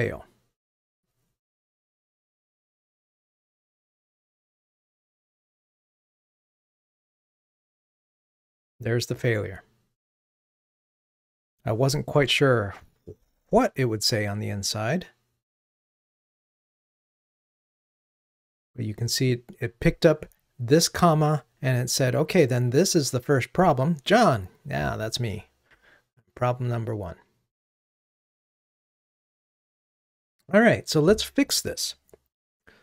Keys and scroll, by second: 0.7 ctrl+r.